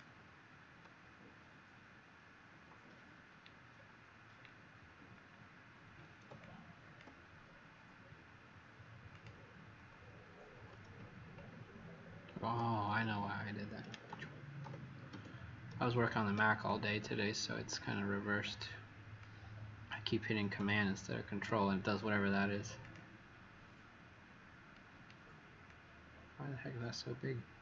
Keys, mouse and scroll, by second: 3.7-5.0 alt+scroll down 1, 5.0-6.2 alt+scroll up 2, 6.5 click, 9.0 click, 10.8 alt+z, 13.0 Escape, 14.0 ctrl+z, 14.6 ctrl+z, 15.1 ctrl+z, 15.6 ctrl+z, 16.6 click, 20.6 click, 21.1 click, 22.8 click.